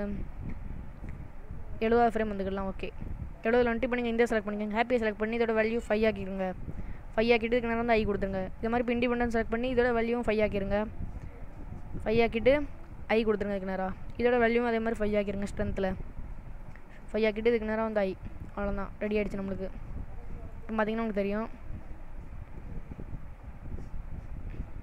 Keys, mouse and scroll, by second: 3.8 click, 5.8 click, 7.9 i, 8.7 click, 10.1 click, 13.2 i, 14.4 click, 15.4 click, 18.0 i, 19.2 click, 20.6 click.